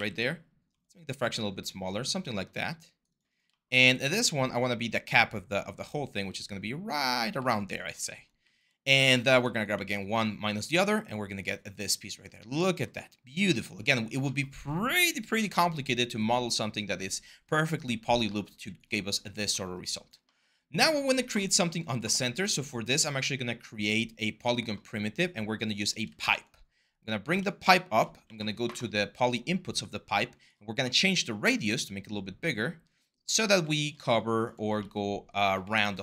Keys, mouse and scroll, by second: 3.5 w, 28.0 ctrl+a, 33.2 4.